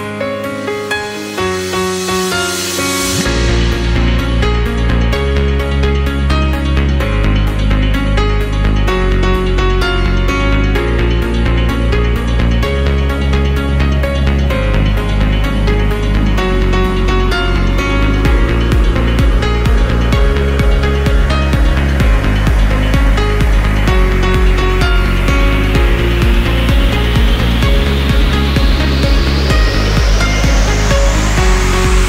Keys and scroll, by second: 3.7 Down, 12.3 Down.